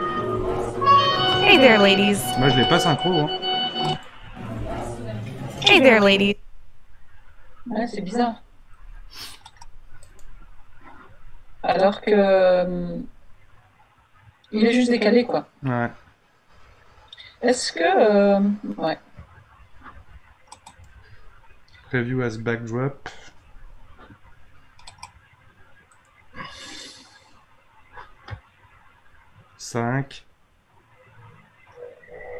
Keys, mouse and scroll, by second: 2.3 space, 3.1-4.1 drag, 4.1 space, 6.1 space, 10.0-13.2 drag, 25.9-29.0 drag.